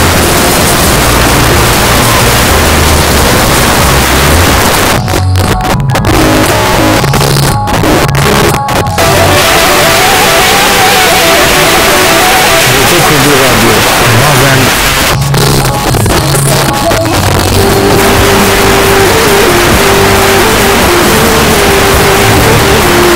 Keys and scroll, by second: 4.6 Page_Down, 14.7 Page_Down.